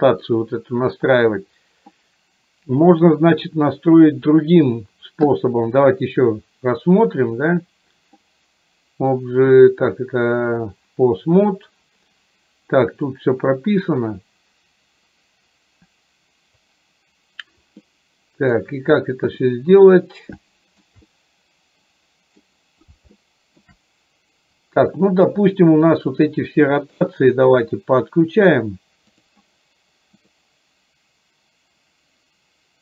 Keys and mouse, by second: 6.2-10.8 drag, 13.2-16.8 drag, 17.9 middle click, 19.4 middle click, 20.6 shift+middle click, 21.1-22.5 middle drag, 23.2 shift+middle click, 25.9 click.